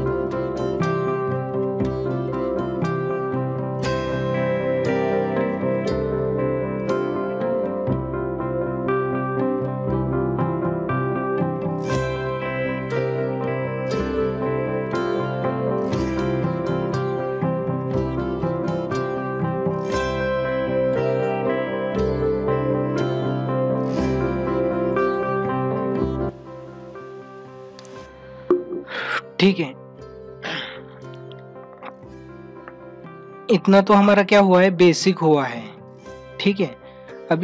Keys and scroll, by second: 4.4 space, 5.2 space, 6.1 ctrl+=, 6.7 ctrl+=, 7.1 space, 7.2 ctrl+=, 7.8 space, 9.4 space, 9.7 ctrl+=, 11.3 ctrl+=, 11.9 space, 13.2 space, 15.5 space, 16.0 ctrl+alt+z, 16.5 ctrl+-, 17.3 ctrl+alt+z, 17.7 space, 20.3 space, 21.6 ctrl+alt+z, 27.6 ctrl+-, 32.4 ctrl+-.